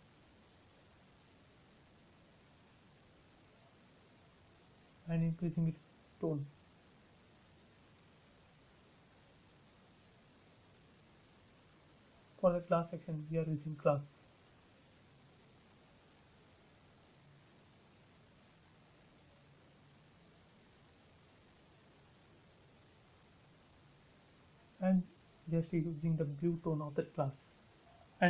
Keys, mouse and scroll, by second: 1.2 space, 2.6-7.1 drag, 7.1 scroll down 1, 7.9 click, 8.3 scroll down 1, 9.6 click, 12.1-13.2 scroll down 1, 13.2 click, 16.6 click, 21.9 click, 22.4 space, 22.9-26.3 drag, 26.3-27.2 scroll down 1, 27.5-28.2 drag.